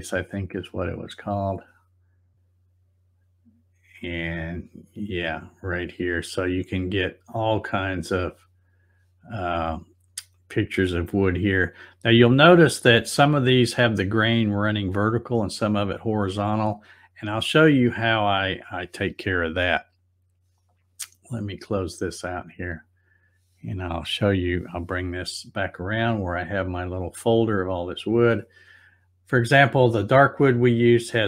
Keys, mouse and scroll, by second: 1.1 click, 7.6 click, 9.4-10.5 scroll down 1, 10.6-11.5 scroll down 2, 12.2 scroll down 1, 12.3 scroll up 1, 22.7 click, 24.4-25.6 drag, 26.5 click.